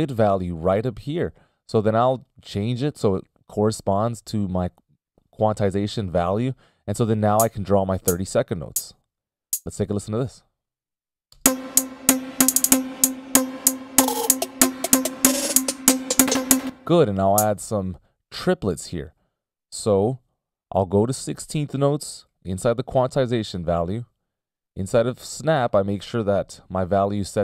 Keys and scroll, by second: 1.3 ctrl+alt+super+m, 11.8 space, 12.4 t, 16.8 space, 18.5 BackSpace, 27.1 ctrl+alt+super+m.